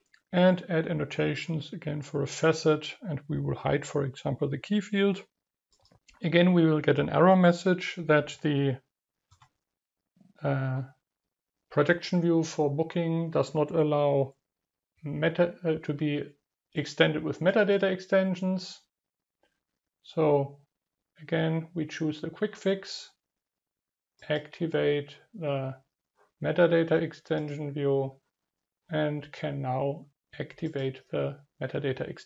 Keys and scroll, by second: 6.7 ctrl+KP_1.